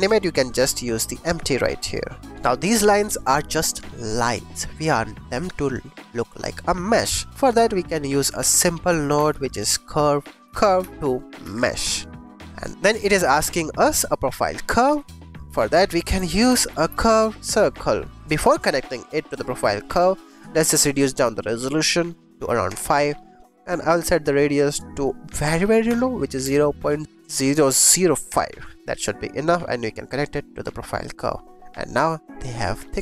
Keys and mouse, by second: 8.3 shift+a, 12.8 click, 14.4 click, 14.4 middle click, 14.6 click, 14.8 shift+a, 15.4 BackSpace, 17.0 click, 17.7-19.7 drag, 20.2 click, 20.9-22.6 drag, 24.6-28.2 drag, 27.0 typing, 29.1 click, 29.9-31.0 drag.